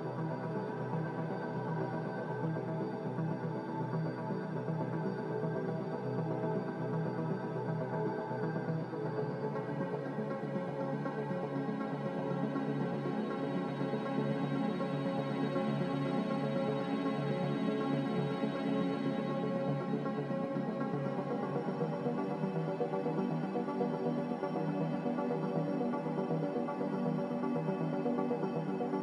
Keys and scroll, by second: 2.9 ctrl+g, 13.9-15.0 typing, 15.2 Return, 19.0 1, 19.0 8, 19.0 0, 21.2 typing, 25.1-26.1 typing, 26.2 Return.